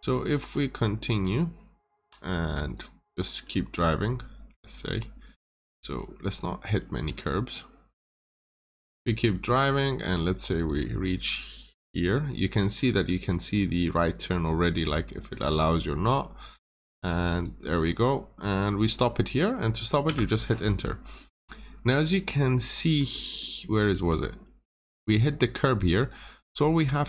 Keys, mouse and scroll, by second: 0.0 middle click, 2.6 click, 3.0 middle click, 5.1 scroll up 1, 6.2 click, 6.7 middle click, 8.0 click, 8.4 middle click, 9.3 scroll down 1, 13.8 click, 20.0 Return, 21.1 middle click, 21.7 scroll up 1, 21.9-22.2 scroll down 2, 22.0 middle click, 22.9 scroll up 1, 23.3 middle click, 23.7 scroll down 1, 23.8 middle click, 24.2 scroll up 1, 25.9 click, 26.4 scroll up 1.